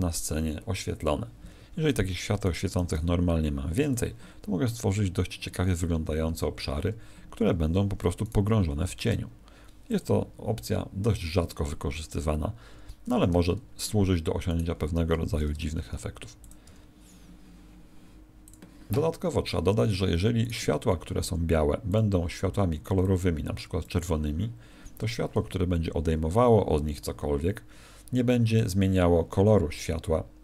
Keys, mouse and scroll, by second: 1.5 Escape, 2.4 right click, 2.7 shift+d, 3.9 click, 7.4 Escape, 8.2 right click, 8.8 shift+d, 9.9 click, 12.7 Escape, 14.4 right click, 15.3 shift+f, 16.4 click, 16.6 g, 18.7 click, 20.3 right click, 21.8 click.